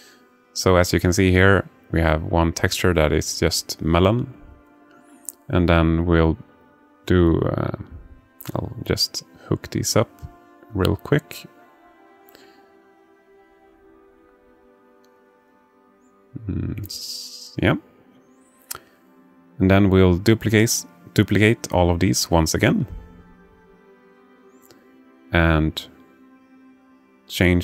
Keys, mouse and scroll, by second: 4.5 click, 9.3-11.3 drag, 16.3 ctrl+middle click, 18.7-19.7 drag, 20.6 shift+d, 23.7 alt+shift+middle click, 24.5 alt+shift+middle click, 25.6 click, 26.7 click.